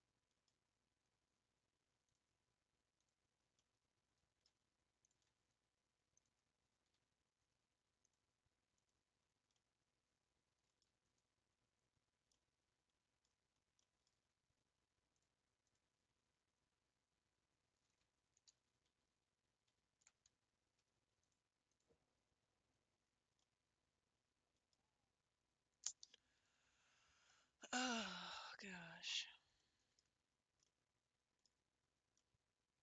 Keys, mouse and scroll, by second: 3.1 click, 3.5 scroll down 1, 3.6-5.1 middle drag, 5.1 alt+click, 8.9 click, 9.6-11.5 middle drag, 11.5-11.9 scroll down 1, 11.9 scroll up 1, 12.3-13.3 middle drag, 13.3 scroll up 3, 13.8 middle click, 14.2 a, 15.8-18.5 drag, 18.5 ctrl+z, 19.0 ctrl+z, 19.7 ctrl+z, 20.8 a, 21.8-23.4 drag, 23.4-24.8 middle drag, 24.8 scroll down 2, 27.3-30.0 middle drag, 30.0 Tab, 30.2-30.6 scroll down 3, 30.6 middle click, 31.4 Tab, 31.9 scroll up 2, 32.2-32.8 middle drag.